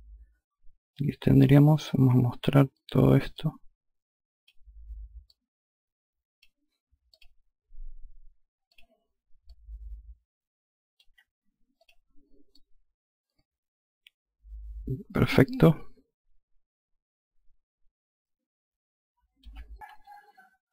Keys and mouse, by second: 2.8 click, 4.8 click, 6.6 click, 8.2 click, 9.0 alt+click, 11.3 click, 12.0 alt+click.